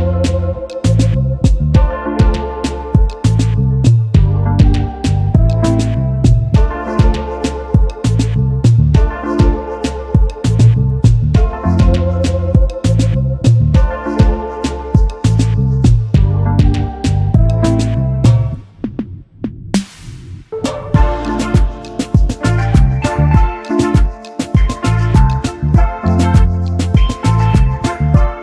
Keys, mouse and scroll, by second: 0.1 space, 0.2 double click, 0.7 alt+scroll down 1, 1.2 alt+scroll up 1, 4.1 alt+shift+click, 7.2-7.5 alt+scroll down 1, 7.8 space, 7.9 double click, 10.4 ctrl+c, 10.7 ctrl+f, 11.9 alt+shift+click, 14.3 alt+scroll up 1, 16.7 alt+shift+click, 18.6 space, 18.7 double click, 21.6 alt+shift+click, 25.3 alt+scroll down 1, 26.3-26.8 alt+scroll up 1.